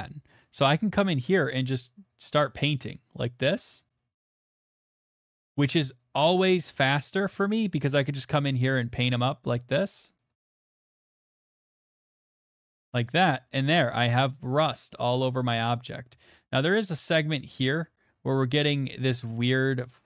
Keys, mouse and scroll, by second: 0.8 middle click, 0.8 ], 1.4 ], 1.7 click, 2.2 click, 3.4 click, 3.4 click, 3.6 click, 3.9 click, 4.4 middle click, 4.7 click, 5.0 click, 5.1 click, 5.4 middle click, 5.7 click, 6.3 click, 7.1 click, 7.5 click, 7.8 click, 8.1 click, 8.3 click, 9.1 click, 9.4 click, 9.8 click, 10.1 click, 10.4 click, 10.6 click, 10.9 click, 11.3 click, 11.4 click, 11.6 click, 11.7 click, 11.9 click, 12.1 click, 12.6 click, 12.6 middle click, 12.6 middle click, 12.6 middle click, 13.0 shift+middle click, 13.5 shift+middle click, 13.7 middle click, 13.7 middle click, 14.9 middle click, 15.1 middle click, 15.1 middle click, 15.2 middle click, 15.6 shift+middle click, 18.0 middle click, 18.5 shift+middle click, 18.9 middle click, 19.4 shift+middle click, 19.7 shift+middle click.